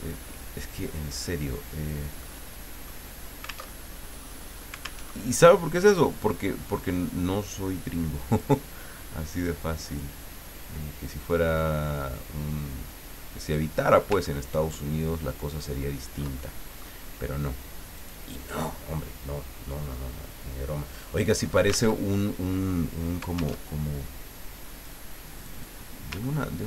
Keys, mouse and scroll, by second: 0.1-2.1 drag, 2.1-3.4 middle drag, 3.8 alt+Tab, 5.1 alt+Tab, 6.6-9.3 drag, 9.6 click, 11.0-14.1 drag, 14.2 ctrl+middle click, 14.9-15.4 ctrl+scroll down 1, 15.8 ctrl+scroll down 1, 16.4 ctrl+middle click, 17.9 click, 21.9 alt+Tab, 23.5 alt+Tab, 24.7 click, 25.3 click, 26.2-26.5 ctrl+scroll up 2.